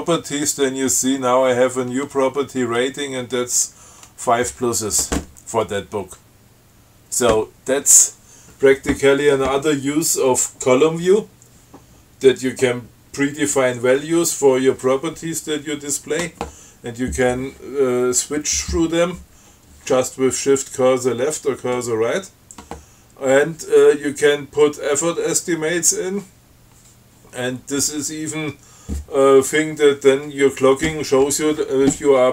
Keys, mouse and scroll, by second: 0.1 Tab, 24.3 scroll up 2.